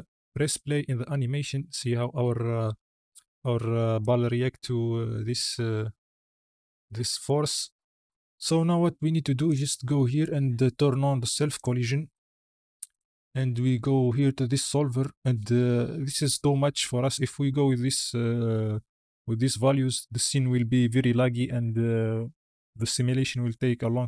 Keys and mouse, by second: 7.0 space, 7.7 click, 9.4 click, 11.4 click, 12.0 click, 12.8 click, 13.9 click.